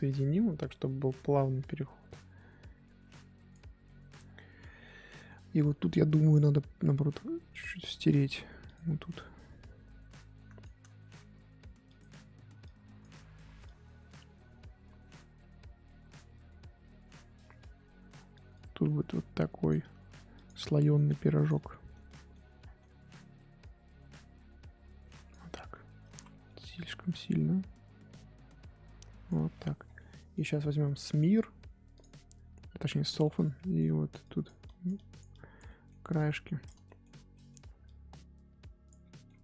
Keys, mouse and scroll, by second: 3.8-7.6 middle drag, 7.6 click, 8.3 f, 9.1-11.2 drag, 11.2 ctrl+z, 11.9 click, 12.6 click, 13.3 ctrl+z, 13.6-16.4 drag, 16.4-17.0 scroll down 5, 17.0-17.4 scroll up 5, 17.4-18.5 middle drag, 18.5-20.0 drag, 20.0 f, 20.6 click, 21.5-23.6 middle drag, 23.6-26.1 drag, 26.1 ctrl+z, 26.3 middle click, 27.1-29.8 drag, 29.8 scroll down 2, 29.9-32.0 middle drag, 32.0 click, 32.1-32.9 scroll up 6, 32.9 scroll down 1, 33.1 middle click, 33.2 scroll up 3, 33.5 middle click, 34.2-35.6 drag, 35.6 middle click, 36.1 click, 36.9 shift+middle click, 37.8-39.0 drag, 39.0 scroll down 5, 39.1 middle click, 39.3-39.4 scroll up 4.